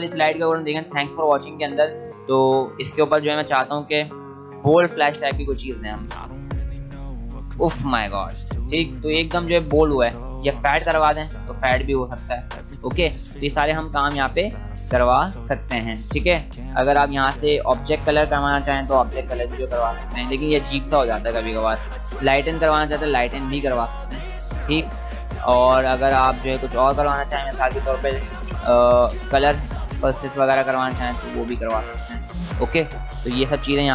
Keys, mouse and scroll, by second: 4.9 click, 9.8 click, 13.0 click, 17.6 click, 20.5 click, 22.2 click, 25.5 click, 29.2 click, 32.4 click.